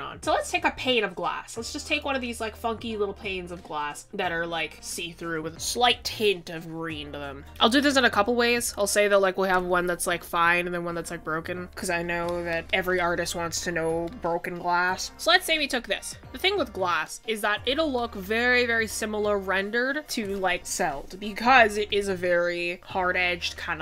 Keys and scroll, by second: 15.6 typing, 17.7 typing.